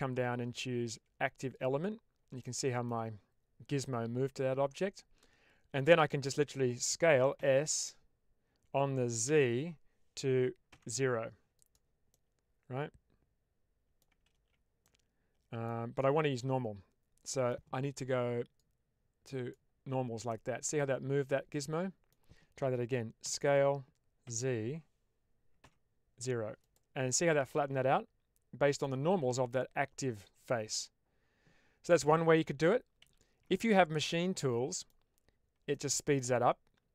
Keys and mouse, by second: 2.3 middle click, 3.8-5.6 middle drag, 5.9 shift+middle click, 7.3 s, 9.2 z, 10.6 0, 11.4 click, 12.1-13.9 middle drag, 14.2 ctrl+z, 14.8 middle click, 16.3-17.4 middle drag, 18.5 click, 20.3-22.0 middle drag, 23.1 s, 24.1 z, 25.5 0, 26.5 click, 27.0-28.7 middle drag, 30.6-31.9 middle drag, 32.3 ctrl+z, 32.9 ctrl+z, 33.5-34.8 middle drag, 35.6 shift+middle click.